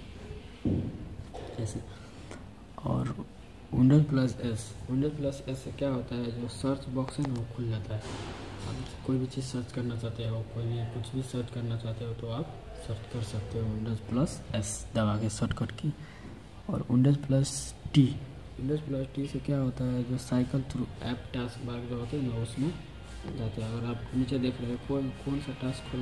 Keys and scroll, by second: 7.1 super+s, 24.6 super+t, 25.1 super+t, 25.5 super+t, 25.9 super+t.